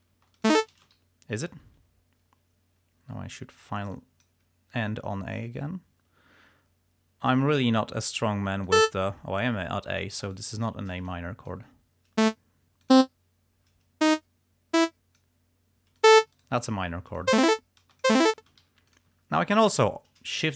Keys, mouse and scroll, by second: 0.0 shift+space, 0.5 shift+click, 1.1 shift+g, 1.8 d, 4.0 click, 8.8 click, 10.4 shift+right click, 11.2 shift+click, 12.3 click, 13.0 click, 14.1-15.4 drag, 16.1 shift+click, 16.5 shift+right click, 17.2 click, 17.4 space, 18.0 click, 18.7 g, 19.1 ctrl+click, 19.4 ctrl+scroll down 2, 20.4 shift+d.